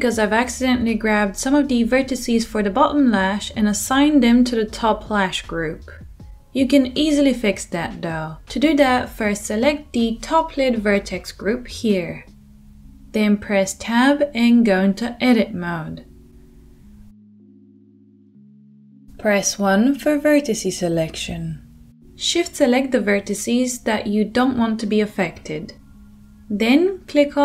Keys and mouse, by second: 3.7 middle click, 4.1 Tab, 4.2-10.3 drag, 10.3-15.8 middle drag, 13.4 Tab, 15.8 click, 15.9-17.3 middle drag, 17.3-22.4 drag, 21.1 1, 22.4-27.4 shift+middle drag.